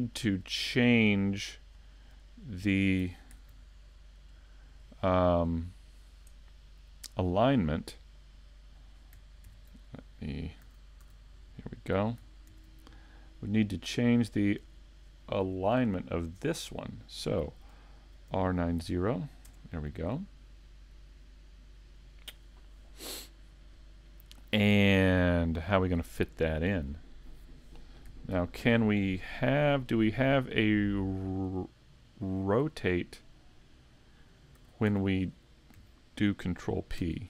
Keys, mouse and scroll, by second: 11.0 a, 28.3 ctrl+Up, 32.5 shift+middle click, 32.5 scroll down 5, 34.6 a, 37.0 ctrl+p.